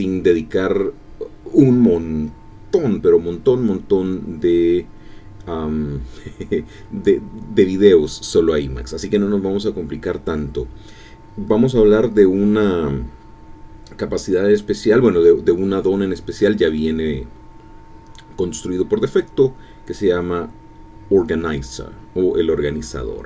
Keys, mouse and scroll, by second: 18.0 ctrl+x, 18.1 ctrl+f.